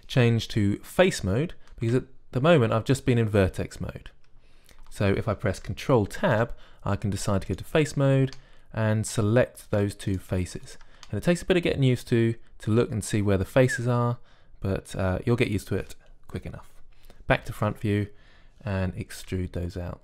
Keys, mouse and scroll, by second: 7.1 ctrl+Tab, 10.9-13.5 drag, 13.9 middle click, 18.1 KP_1.